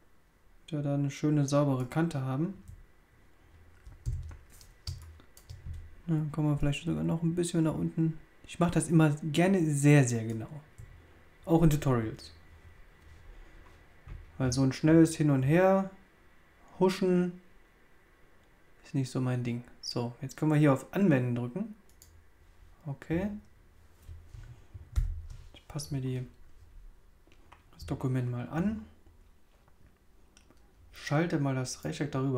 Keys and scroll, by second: 4.8 super+space, 24.9 super+0.